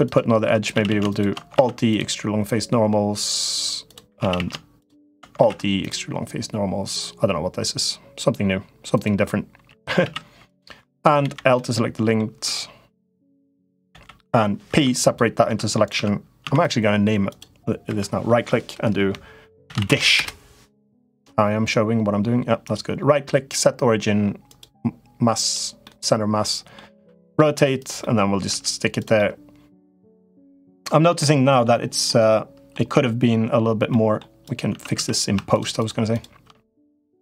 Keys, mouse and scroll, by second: 0.5 a, 0.6 a, 0.8 shift+click, 1.4 alt+e, 3.9 a, 4.1 a, 4.6 shift+click, 5.1 alt+e, 9.6 a, 9.8 a, 11.0 l, 11.3 middle click, 12.9 l, 13.6 l, 14.4 p, 15.2 Tab, 15.6 click, 15.7 Tab, 16.2 Tab, 16.4 click, 17.0 click, 17.6 F2, 22.5-25.3 right drag, 25.6 middle click, 26.7 r, 27.7-28.9 middle drag, 28.7 g, 29.1 middle click, 30.6 middle click, 31.8 middle click, 33.7 middle click, 34.2 click, 34.5 Tab, 34.7 3, 35.5 shift+click, 35.9 shift+click.